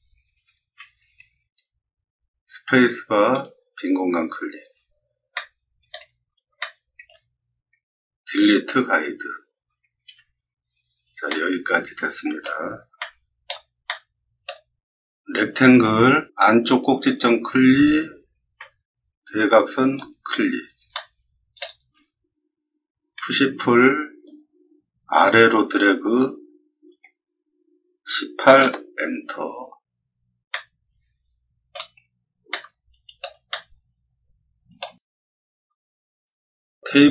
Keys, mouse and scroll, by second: 0.3-2.4 middle drag, 2.5 space, 3.3 click, 4.6-5.8 middle drag, 6.2-7.5 scroll up 6, 6.7 shift+middle click, 8.5 d, 11.2-12.4 middle drag, 12.9 shift+middle click, 13.8 middle click, 15.6 r, 16.7 click, 19.7 click, 20.9 middle click, 23.1 p, 24.2-25.7 drag, 26.8 1, 28.0 8, 30.4-31.6 middle drag, 32.4-33.1 shift+middle drag, 33.4-34.7 middle drag, 36.9 t.